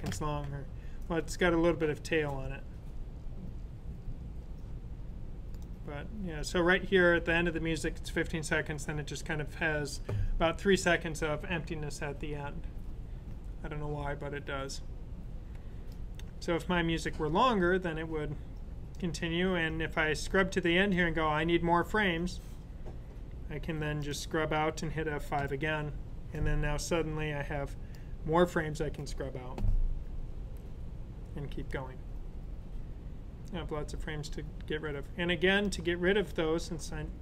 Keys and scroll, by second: 25.5 F5.